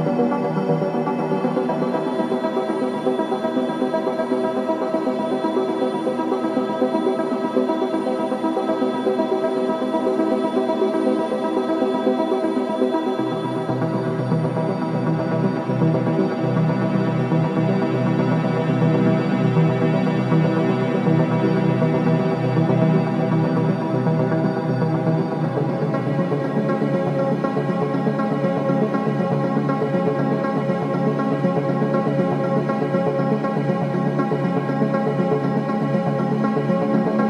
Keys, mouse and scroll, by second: 0.3 alt+middle click, 0.9 alt+middle click, 2.3 alt+click, 3.4 click, 3.8 alt+click, 4.4 alt+middle click, 6.6 click, 7.0 h, 7.8 click, 8.6 alt+click, 9.4 scroll down 1, 9.7 alt+middle click, 10.6-11.2 scroll up 1, 11.2 click, 12.8 alt+middle click, 13.8-15.7 drag, 15.7 click, 16.6 alt+middle click, 17.5 scroll up 1, 17.9 alt+middle click, 18.0 alt+middle click, 18.6 alt+scroll down 1, 19.1-19.9 scroll up 1, 21.1 click, 21.6-23.8 right drag, 23.8 click, 24.6 k, 24.8 scroll up 1, 24.9-26.4 alt+middle drag, 26.4 click, 27.0 scroll up 1, 27.4 alt+middle click, 28.4 click, 28.4 click, 29.5 alt+middle click, 29.9-31.5 alt+right drag, 31.5 scroll up 1, 32.1-34.5 right drag, 34.5 alt+right click, 35.7 alt+right click, 36.3 middle click, 37.1-37.2 drag.